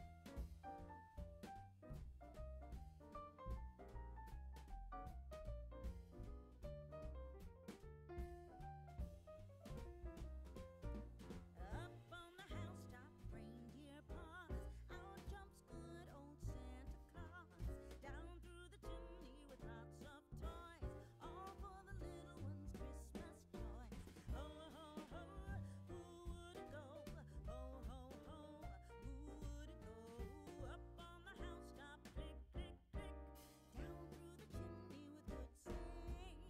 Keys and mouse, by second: 0.5 click, 1.0 x, 1.3 click, 2.8 ctrl+a, 4.1 click, 4.4 g, 5.0 click, 7.6 click, 12.0 click, 12.8 click, 14.8 click, 18.0 click, 18.5 g, 19.6 click, 22.8 click, 25.3 Tab, 26.6 click, 27.7 click, 29.3 click, 30.4 g, 31.9 right click, 32.1 Tab, 32.6 a, 34.6 click, 35.1 Tab, 36.2 click.